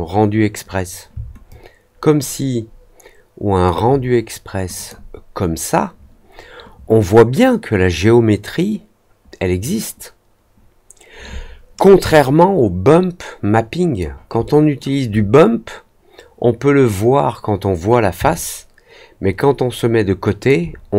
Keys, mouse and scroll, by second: 1.4-3.6 alt+drag, 4.7 click, 12.0-13.9 alt+drag, 14.4 alt+middle click, 18.2-20.4 alt+drag.